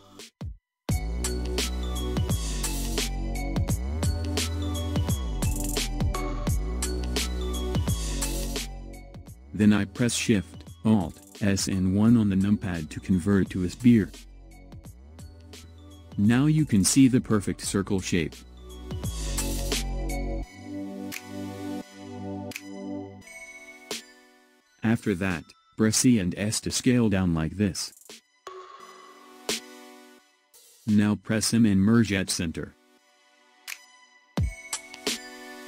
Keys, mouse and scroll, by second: 2.5-3.0 scroll down 2, 3.0-6.9 middle drag, 6.9-9.3 scroll up 1, 9.3-9.9 scroll up 1, 11.1 alt+shift+s, 15.4-17.0 middle drag, 17.0-18.1 scroll up 2, 18.1-19.0 scroll down 2, 19.0-20.0 scroll up 1, 20.0-22.0 scroll up 1, 24.8 e, 32.1 m.